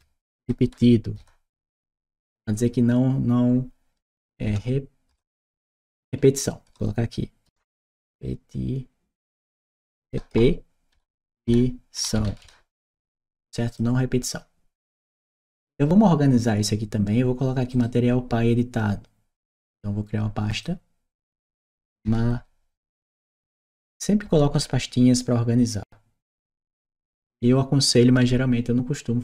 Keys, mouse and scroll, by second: 0.0-1.7 typing, 4.3 BackSpace, 7.3 t, 9.9 BackSpace, 10.8 e, 11.1 t, 13.5 click, 17.5 right click, 20.3 click, 21.9 shift+m, 23.4 shift+t, 24.1 BackSpace, 26.4 t.